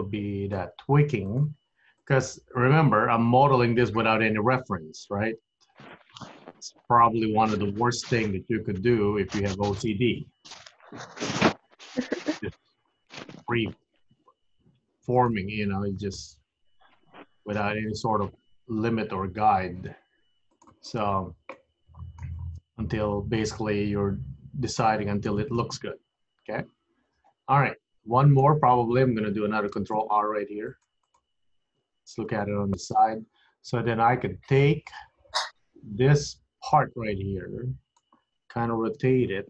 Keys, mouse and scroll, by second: 0.0 click, 0.8 g, 3.0 click, 3.0 g, 6.7 click, 7.8 g, 10.8 click, 11.4 g, 13.0 click, 14.0 g, 15.7 click, 16.4 g, 18.7-19.2 scroll down 4, 19.2-19.7 scroll up 5, 19.7-20.5 scroll down 2, 20.5 click, 21.2 scroll down 2, 21.7 middle click, 22.5-23.5 scroll up 3, 23.5 middle click, 25.2-25.6 scroll down 4, 25.6 middle click, 29.9 ctrl+r, 31.9 KP_3, 35.0 click, 35.9 click, 39.0 r.